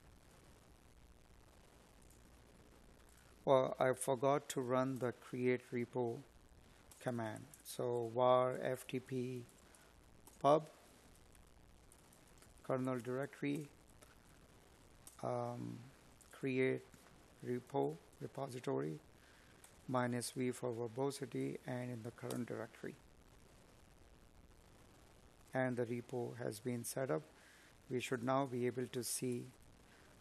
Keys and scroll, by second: 5.4 space, 10.0 space, 10.7 Tab, 16.4 space, 18.8 space, 27.2 space.